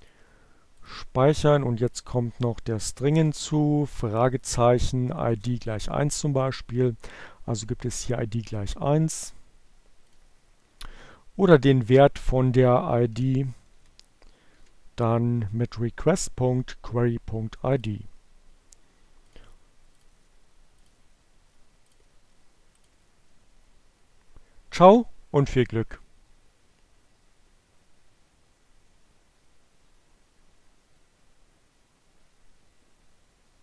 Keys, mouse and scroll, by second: 0.5 click, 1.7 click, 4.0 Down, 5.0 Return, 9.1 click, 11.8 Left, 12.0 Down, 12.6 Delete, 15.2 click, 16.6 click, 17.4 click, 18.3 click, 19.5 click, 20.4 click.